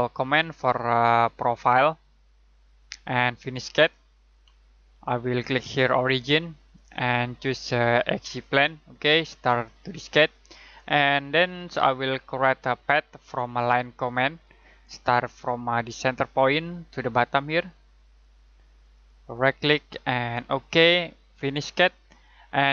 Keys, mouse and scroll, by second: 6.7 click, 11.3 scroll down 1, 11.5 scroll up 1, 12.5 middle click, 14.4 click, 18.8 click, 19.3 right click, 20.4 click.